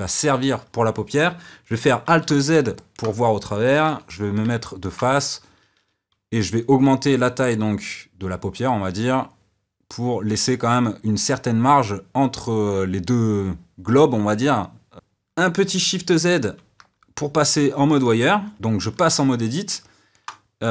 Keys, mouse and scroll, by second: 2.0 alt+z, 2.7-3.8 middle drag, 3.8 KP_1, 4.6-6.4 ctrl+middle drag, 6.4 s, 16.4 shift+z, 18.5 Tab, 19.8-20.7 shift+middle drag.